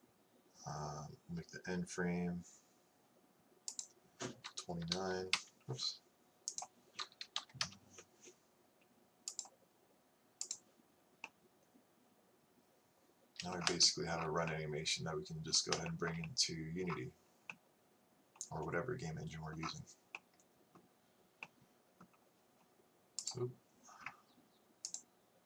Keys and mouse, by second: 23.2-25.4 drag.